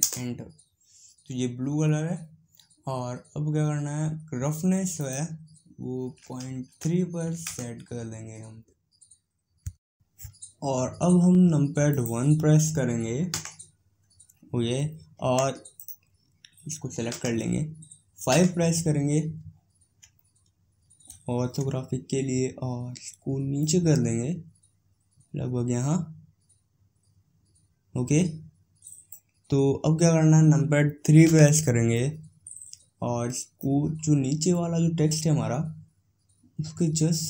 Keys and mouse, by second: 4.9-13.1 drag, 13.1 KP_1, 15.6-16.9 drag, 16.9 KP_1, 18.1 KP_5, 21.6-23.4 middle drag, 23.4-25.7 drag, 31.0 KP_3, 33.4-35.2 drag.